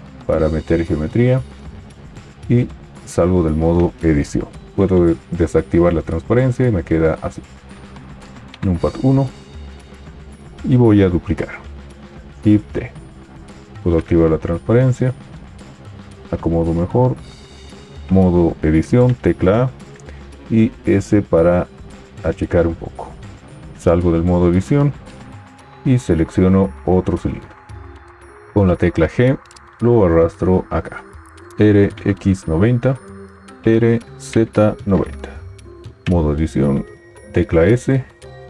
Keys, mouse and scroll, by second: 3.5 Tab, 4.8 alt+z, 8.6 KP_1, 12.5 shift+d, 14.0 alt+z, 16.3 g, 18.0 Tab, 19.0 a, 20.8 s, 23.7 Tab, 29.0 g, 31.5 r, 33.6 r, 36.0 Tab, 37.4 s.